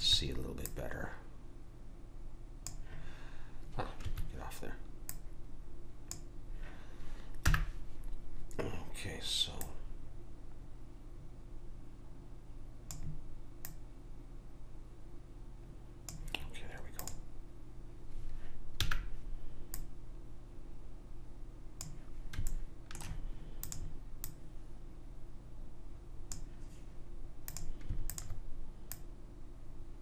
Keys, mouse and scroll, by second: 0.0-2.4 drag, 5.1 click, 7.4 n, 9.6 click, 13.6 click, 17.0 click, 18.8 n, 19.7 click, 22.5-23.6 middle drag, 23.6 click, 23.6 right click, 25.0 right click, 25.9 click, 27.4-30.0 drag.